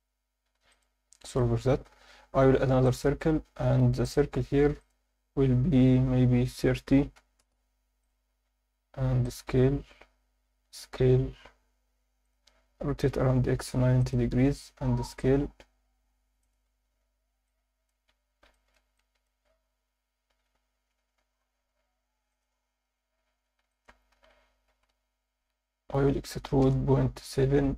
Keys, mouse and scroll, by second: 0.7 click, 1.0 x, 1.7 shift+a, 4.0 drag, 4.8-7.4 drag, 8.0 drag, 8.8 s, 9.2 click, 9.6 z, 10.1-10.7 scroll up 1, 10.7 s, 12.2 click, 12.8-14.5 typing, 14.0 click, 16.4 shift+click, 16.8 Tab, 17.5 alt+middle click, 18.1 1, 18.5 alt+shift+middle click, 19.0 ctrl+alt+middle click, 21.0 g, 21.2 y, 22.3 click, 23.0 z, 23.7 alt+shift+middle click, 24.1 e, 24.3 s, 24.7 ., 24.9 9, 26.6 BackSpace.